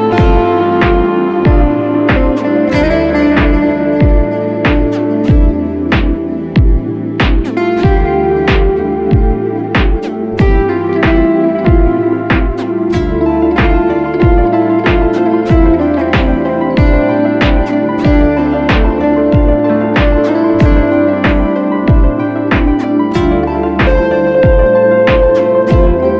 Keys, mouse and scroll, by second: 10.3 alt+click, 12.2-12.7 alt+scroll down 1, 20.8 right click.